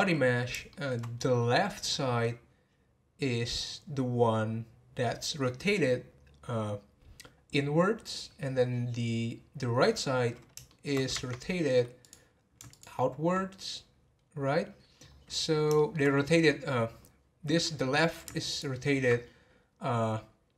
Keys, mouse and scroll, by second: 0.7-1.1 shift+middle drag, 1.1 scroll up 3, 10.6-11.1 shift+middle drag, 11.1 Tab, 12.0 click, 14.4-15.7 scroll down 11, 15.7 shift+middle click, 16.1-16.6 scroll up 11, 18.5 alt+click.